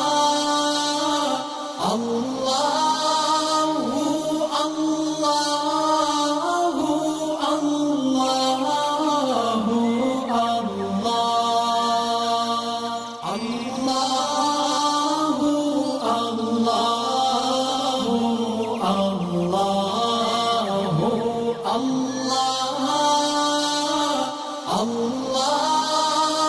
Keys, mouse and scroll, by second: 10.5-10.9 alt+scroll down 2, 11.3 space, 11.4 click, 11.8-12.3 alt+scroll up 2, 12.5 click, 15.0 click, 20.2 shift+drag, 21.7 drag, 24.6-24.9 drag.